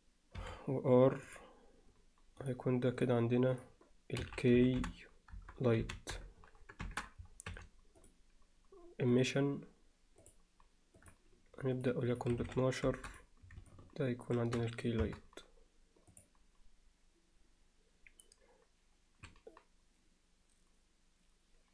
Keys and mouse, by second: 0.4 r, 2.5 drag, 3.6-8.1 drag, 7.5 m, 9.2-10.3 drag, 11.1 click, 11.8 click, 12.2 click, 15.1 KP_0.